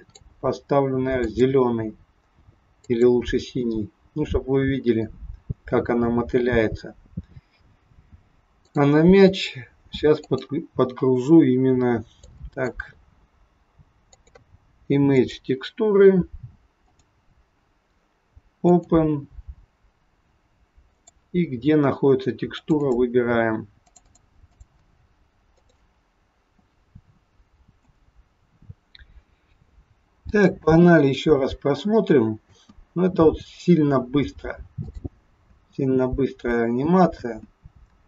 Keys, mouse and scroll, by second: 3.9-4.8 scroll up 4, 5.2 scroll down 2, 6.9-7.3 scroll down 2, 8.7 click, 27.9 click, 30.5 space, 32.6 space, 34.8 click, 35.5 space, 37.3 space.